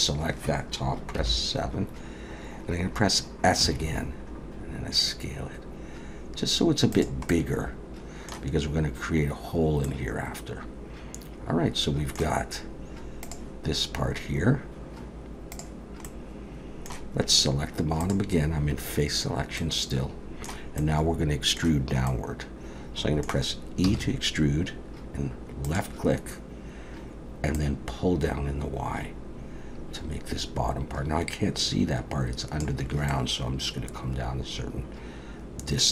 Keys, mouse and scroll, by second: 1.2 KP_7, 3.6 s, 7.3 middle click, 9.8 middle click, 16.1 middle click, 18.0 click, 19.6 middle click, 20.8 middle click, 22.1 middle click, 23.9 e, 27.5 click, 33.1 middle click.